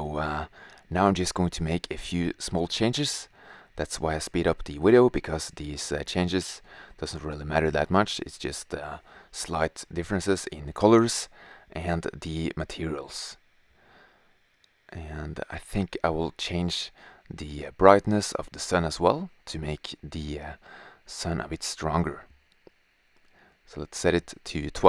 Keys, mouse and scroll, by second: 1.0 click, 2.2 click, 2.6 shift+z, 4.6 shift+z, 5.0 s, 5.8 s, 6.9 shift+z, 9.3-10.4 drag, 17.2-17.9 drag, 21.3 drag, 22.0 shift+z, 24.7 drag.